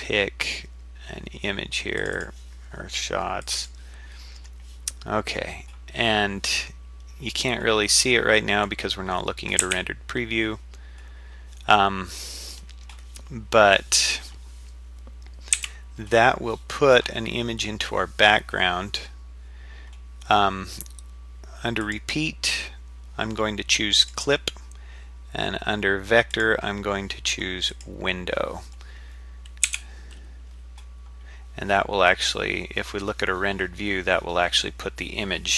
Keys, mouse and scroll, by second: 9.6 z, 15.6 z, 21.8-24.1 drag, 26.3-27.8 drag, 29.7 z.